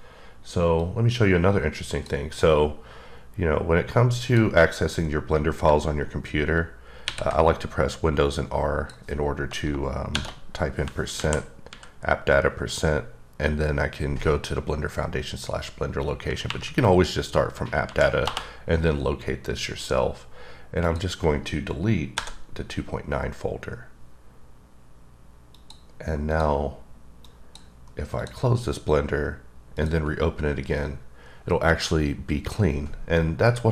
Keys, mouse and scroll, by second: 0.8 click, 4.2 click, 7.1 super+r, 8.3 click, 10.1 shift+5, 11.1 Down, 11.7 Down, 16.5 Up, 17.8 Down, 18.2 Return, 20.9 click, 22.1 Delete, 25.5 click, 26.3 click.